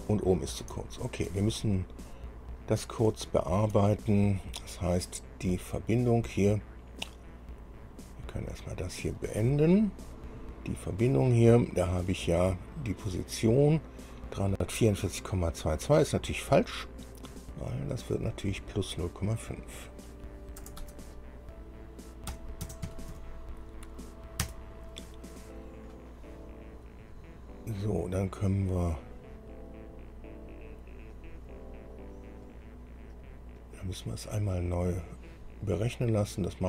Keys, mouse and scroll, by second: 0.2-0.9 scroll down 2, 1.0 shift+middle click, 1.8-2.2 shift+scroll up 1, 2.6 scroll up 2, 3.5 shift+click, 5.7 click, 9.1 click, 10.3 click, 14.3 click, 18.5 click, 19.9 click, 20.8 BackSpace, 21.0 BackSpace, 22.5 KP_Add, 22.8 KP_0, 23.3 KP_Decimal, 23.3 KP_5, 24.6 KP_Enter, 28.8 click, 32.6 click, 33.4 click.